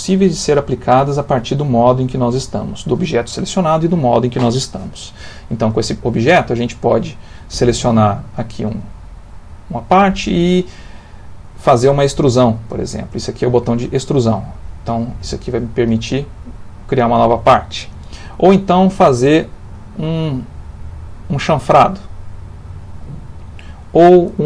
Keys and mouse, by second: 8.2 click, 11.7 click, 15.0 click, 18.6 click, 20.4 click, 24.0 click.